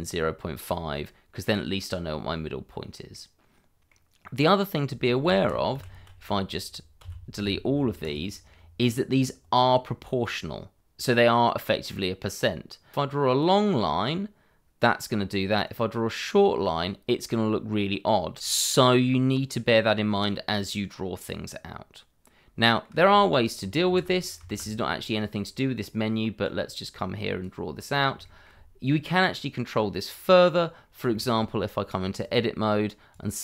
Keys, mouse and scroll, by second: 2.5 scroll down 1, 3.1 middle click, 5.4 ctrl+z, 7.0 a, 8.0 click, 9.6 click, 10.4 shift+middle click, 12.9 click, 15.6 click, 20.2 scroll up 1, 20.9 middle click, 23.1-23.6 scroll down 1, 23.9 ctrl+z, 25.4 middle click, 26.4 click, 28.2 shift+middle click, 28.9-29.7 scroll up 1, 29.8 middle click, 30.8 scroll up 1, 31.1 shift+middle click, 32.2 click.